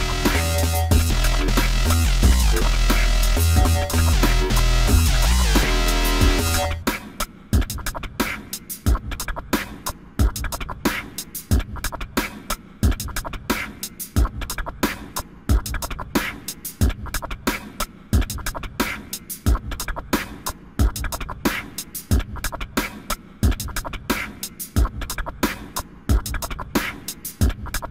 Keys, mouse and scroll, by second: 5.7 click, 8.9 click, 19.8 click, 26.0 click.